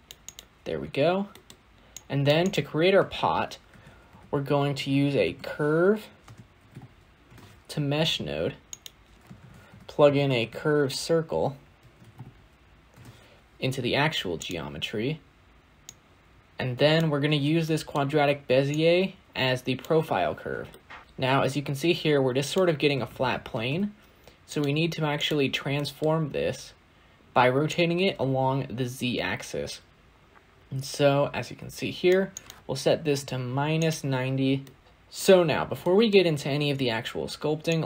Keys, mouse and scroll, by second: 16.9 click, 20.3 scroll down 2, 20.6-21.0 middle drag, 21.0-23.3 scroll up 5, 23.3-24.2 scroll up 1, 24.2 scroll up 1, 24.4 shift+a, 27.2-30.6 drag, 33.6-34.8 drag, 34.8-35.7 scroll up 4, 35.7-37.8 shift+middle drag.